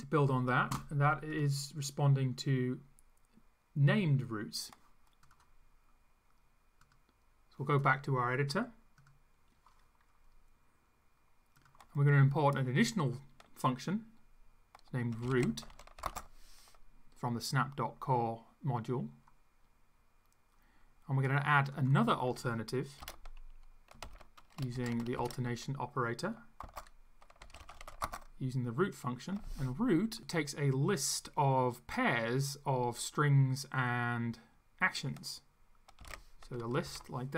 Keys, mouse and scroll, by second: 5.3 click, 6.8 click, 11.6 click, 15.0-16.5 typing, 21.7 click, 23.0 Return, 24.1 shift+,, 24.7 shift+\, 25.2 ., 26.6-28.4 typing, 36.0 [, 36.1 ], 36.8 BackSpace.